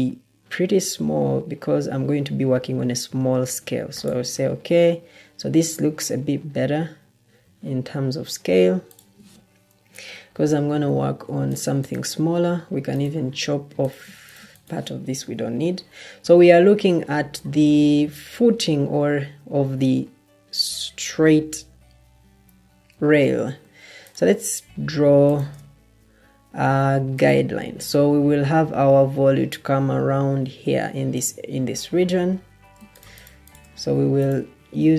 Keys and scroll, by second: 9.7 Delete, 11.1 Escape, 15.3 Delete.